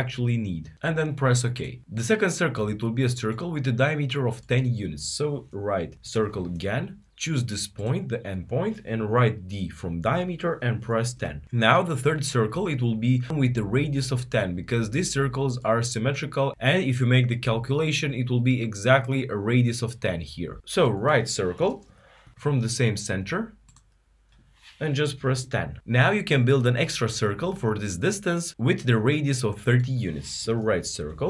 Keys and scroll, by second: 20.9-21.6 typing, 24.7-25.4 typing, 30.1-30.9 typing.